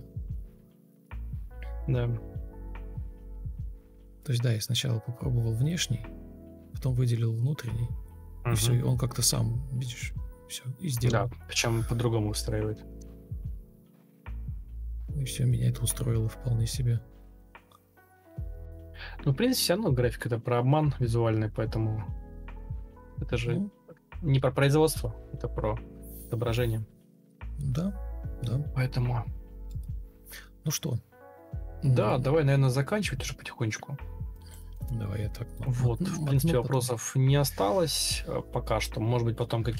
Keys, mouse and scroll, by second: 5.0 Escape, 6.0 ctrl+click, 11.7-12.6 typing, 21.3 ctrl+Delete, 22.1 Delete, 22.4 ctrl+z, 23.1 Delete, 24.3-25.2 typing.